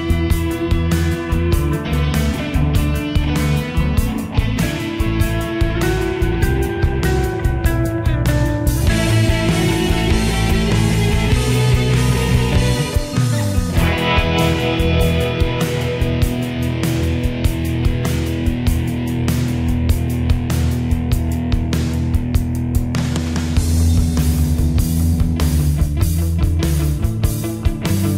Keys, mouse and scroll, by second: 0.0-6.5 shift+drag, 6.5-9.7 drag, 11.0 ctrl+u, 11.7 Escape, 12.0-16.4 drag, 16.4 ctrl+z, 18.0 shift+Page_Down, 18.8 Escape, 19.0-21.8 drag, 21.8 ctrl+r, 24.8 click.